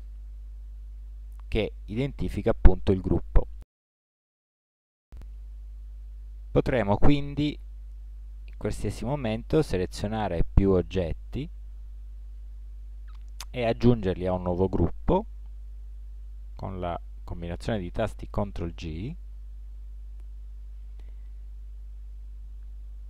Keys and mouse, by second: 11.2 click, 11.9-16.7 middle drag, 19.0 ctrl+g.